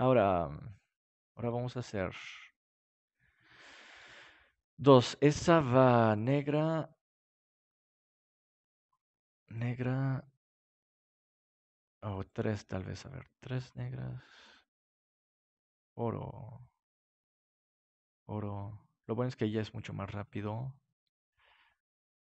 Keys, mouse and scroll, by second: 3.9-6.3 drag, 7.9-13.5 right drag, 8.7-11.0 drag, 12.2-14.4 drag, 14.4 right click, 18.8 click, 19.5 right click.